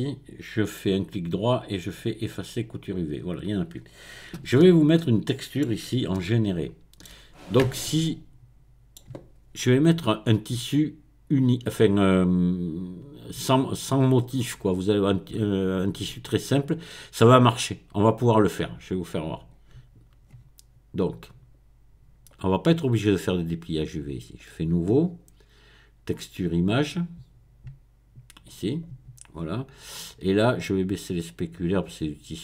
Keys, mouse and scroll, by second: 0.9 right click, 2.5 click, 3.5-4.3 scroll down 1, 4.4 Tab, 4.6 middle click, 6.1-9.9 shift+middle drag, 18.5 click, 19.4 click, 22.3-25.0 drag, 25.0-25.7 scroll down 1, 26.3 click, 28.5 click, 29.3-30.5 scroll down 2, 31.3-32.4 drag.